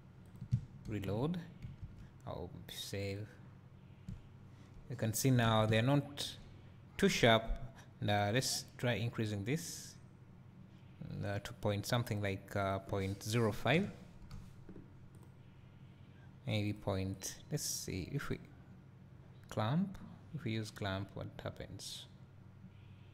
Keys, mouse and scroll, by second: 0.3 click, 8.3 click, 11.3 click, 12.1-15.2 drag, 16.7-17.8 drag, 18.6 click.